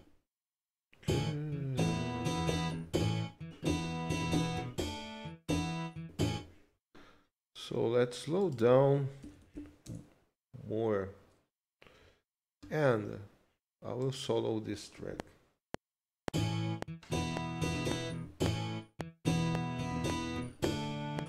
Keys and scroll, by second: 9.2 1, 9.8 Return.